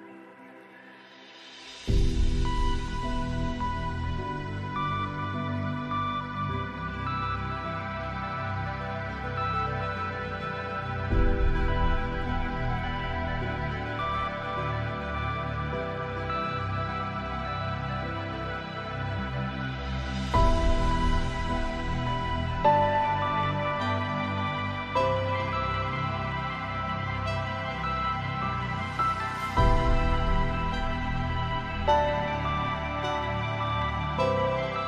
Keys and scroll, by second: 16.9 ctrl+a.